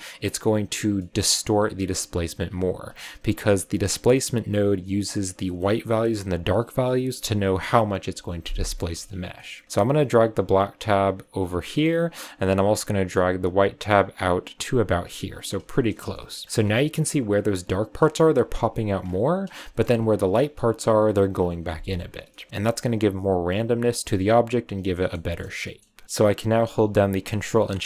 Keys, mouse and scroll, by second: 0.8 scroll down 1, 0.9-4.1 middle drag, 8.7 middle click, 9.0-9.3 scroll up 2, 9.3 middle click, 9.6-10.4 scroll up 3, 10.4-15.5 drag, 15.6-16.5 shift+middle drag, 16.5-17.3 scroll up 4, 16.6-18.9 middle drag, 17.3-18.9 scroll up 1, 19.0-19.5 scroll down 3, 19.5-19.8 shift+middle drag, 19.8 scroll up 3, 20.9-21.3 scroll up 1, 21.3-21.7 scroll down 6, 22.2-22.7 shift+middle drag, 24.9 shift+middle click, 25.3 scroll down 2, 25.6-25.9 middle drag, 25.9 scroll up 2, 26.0-27.8 middle drag.